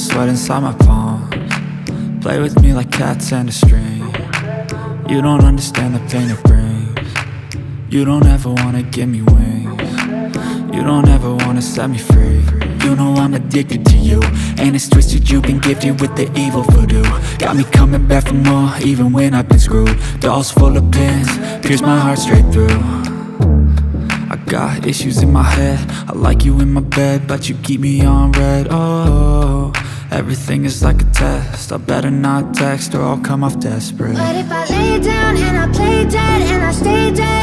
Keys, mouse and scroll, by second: 1.4-7.1 drag, 9.7 click, 10.8 right click, 11.6 click, 14.7 click, 20.3 right click, 22.0 click, 22.0-24.9 drag, 28.5 right click, 29.2 click, 31.2-36.2 drag.